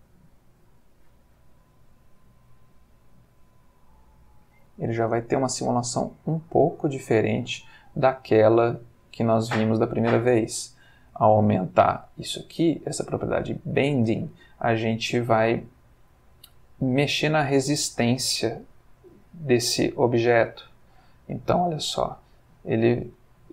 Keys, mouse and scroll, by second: 18.8 Escape, 20.4-23.5 drag.